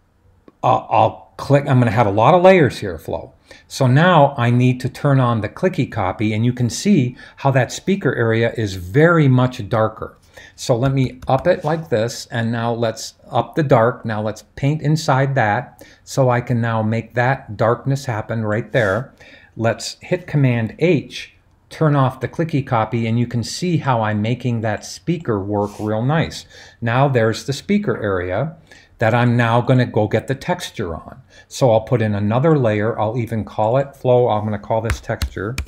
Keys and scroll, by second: 10.8-11.4 typing, 20.5 super+h, 34.7-35.6 typing.